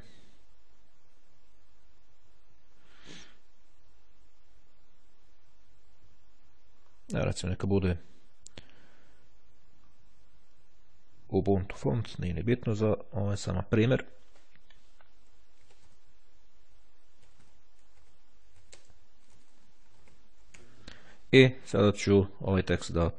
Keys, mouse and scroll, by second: 6.7-7.8 scroll up 1, 8.6-10.2 scroll up 1, 11.7 click, 14.1 click, 14.9 shift+g, 16.2-17.1 typing, 18.5-21.2 typing, 23.0 click.